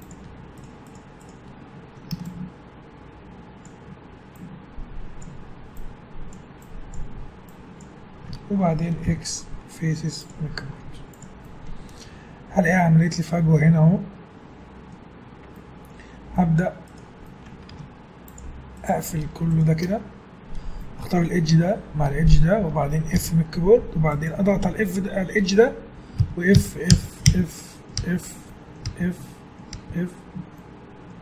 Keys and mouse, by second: 9.1 x, 10.7 z, 12.8 middle click, 15.6-16.9 middle drag, 16.9 right click, 17.2-18.5 drag, 17.7 ctrl+Tab, 23.1 f, 24.1-26.7 drag, 26.2 f, 26.6 f, 26.9 f, 27.2 f, 27.6-30.6 middle drag, 28.3 f, 28.9 f, 29.7 f.